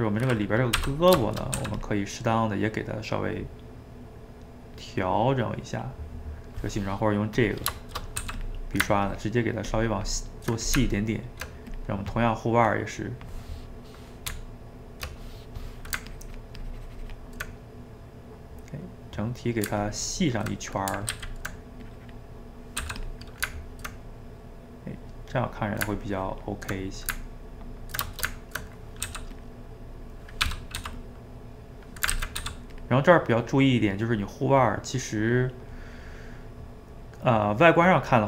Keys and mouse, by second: 0.9 d, 1.2 shift+middle click, 1.6 f, 2.0-3.4 middle drag, 3.4-5.0 drag, 5.0-7.4 middle drag, 7.4 click, 7.8 shift+middle click, 8.2 f, 8.6 middle click, 9.0-10.6 ctrl+drag, 10.6 middle click, 10.7 Tab, 11.8 click, 12.5-14.3 middle drag, 14.3 Tab, 16.1-17.5 ctrl+drag, 17.5-19.9 middle drag, 19.9 ctrl+click, 20.6 middle click, 21.2 ctrl+z, 21.9 click, 22.8 f, 23.2-26.0 ctrl+middle drag, 26.0 ctrl+click, 26.8-29.1 middle drag, 29.1 f, 29.5 middle click, 30.5 g, 30.8 f, 31.4 click, 32.1 ctrl+z, 32.4 f, 32.9 middle click, 33.4-36.0 drag, 36.0-37.5 middle drag, 37.5 click.